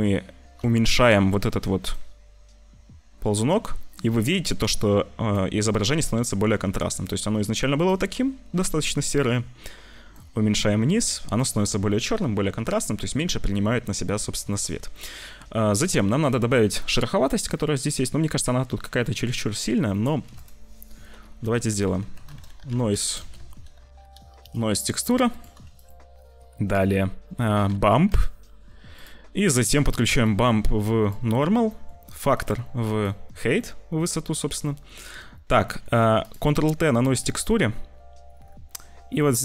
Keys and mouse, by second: 0.6 shift+middle click, 1.8 click, 7.0 click, 10.1-11.4 middle drag, 12.1 ctrl+s, 12.8 click, 14.5 click, 14.9 click, 15.7 click, 16.6 click, 19.9 click, 20.2 shift+a, 23.0 BackSpace, 23.1 BackSpace, 25.6 shift+a, 30.2 click, 31.6 click, 32.3 click, 33.7 middle click, 34.7 shift+middle click, 35.6 middle click, 36.1 click, 36.7 ctrl+t, 37.1 click, 39.1 click.